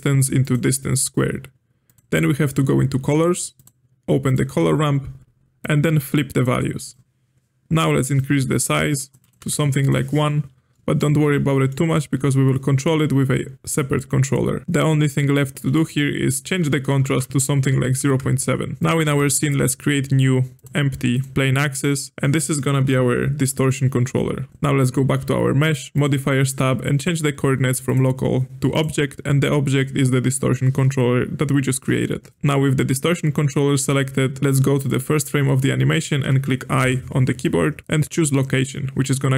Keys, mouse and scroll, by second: 1.1-1.8 scroll down 2, 1.8 click, 2.2-3.5 scroll down 8, 3.5-4.5 drag, 4.5-5.5 scroll down 6, 5.5-7.0 drag, 7.0-7.9 scroll up 2, 8.1-9.9 drag, 10.7-13.0 middle drag, 13.0-14.3 scroll down 4, 14.3-15.8 scroll down 1, 15.8-18.8 drag, 19.0 shift+a, 22.1-24.5 drag, 25.9 click, 27.8-32.4 drag, 34.8-36.7 drag.